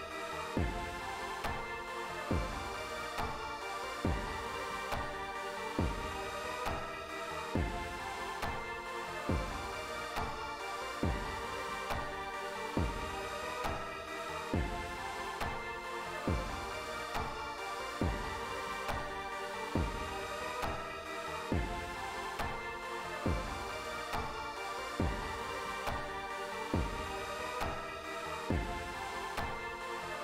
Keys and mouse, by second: 5.1 click, 7.8-12.0 drag, 13.4 click, 21.4 click, 25.3-30.2 drag.